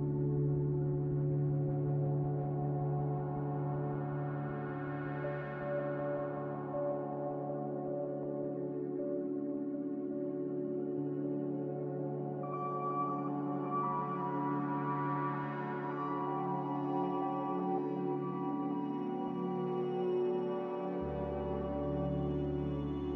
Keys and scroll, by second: 14.8 c, 17.7 z, 19.1-20.0 typing.